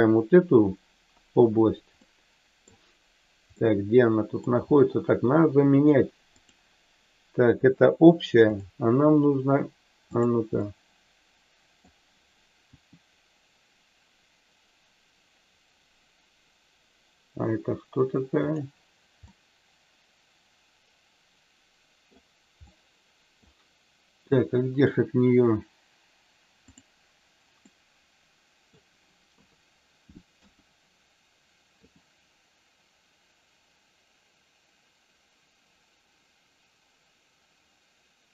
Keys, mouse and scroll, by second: 2.0 middle click, 3.5 middle click, 6.4 click, 10.5-11.8 middle drag, 12.6 r, 18.4 click, 19.3-22.2 middle drag, 22.5 middle click, 24.3 middle click, 27.6-28.8 middle drag, 29.3 KP_3, 30.4 KP_1, 31.8 r.